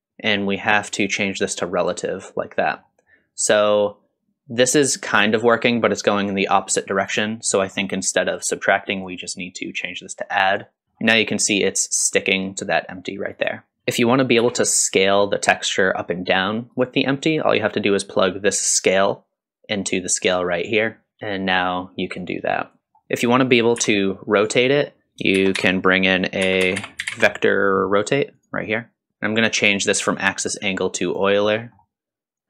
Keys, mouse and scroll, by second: 0.4 middle click, 1.8 click, 2.6 middle click, 3.5-7.3 drag, 7.5 middle click, 8.2 click, 8.9-10.8 drag, 10.8-11.3 scroll down 2, 11.7-13.7 drag, 13.7 middle click, 13.7-14.3 scroll down 1, 14.4 s, 18.5-20.4 drag, 21.2 s, 22.8 middle click, 22.8 click, 22.8-23.3 scroll down 1, 22.8 x, 23.8 r, 25.4 shift+a, 29.1 middle click, 29.1 click, 30.2-31.3 drag, 31.6 middle click.